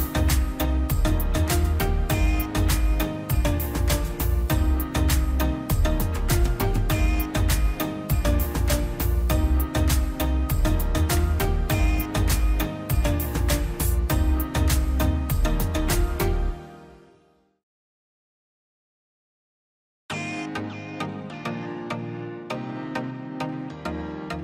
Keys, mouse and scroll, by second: 3.0 middle click, 3.3 scroll up 1, 3.9-5.1 drag, 5.1 scroll down 1, 5.5 middle click, 5.8 scroll down 1, 5.9 middle click, 6.7 scroll down 1, 6.9 middle click, 7.7 click, 8.0 middle click, 8.4 scroll up 1, 9.5-12.6 drag, 12.6 scroll down 1, 12.8-13.2 scroll up 1, 14.3 ctrl+z, 14.8-19.5 drag, 19.5-24.4 drag.